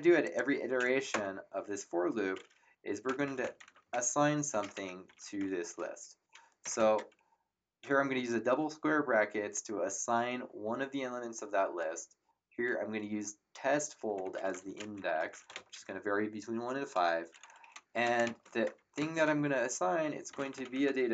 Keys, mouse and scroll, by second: 0.2 click, 1.1 Return, 2.8-5.9 typing, 13.9-16.0 typing, 17.9 End, 18.2 space, 18.4 shift+,, 18.9 space, 18.9 -, 20.0-21.1 typing.